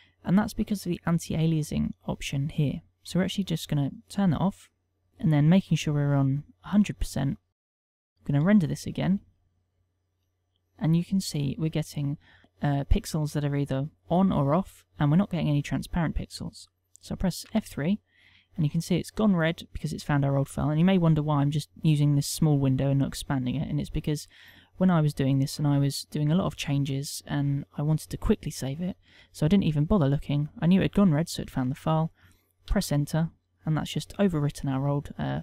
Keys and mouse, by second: 5.0 click, 7.5 click, 9.4 F12.